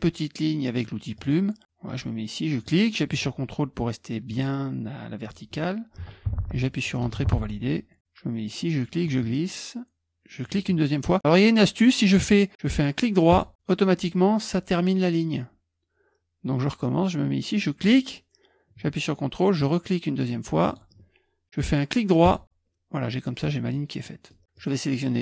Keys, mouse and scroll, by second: 1.2 click, 2.5 click, 7.1 Return, 10.4 ctrl+click, 20.7 ctrl+click, 23.5 middle click, 23.7 click.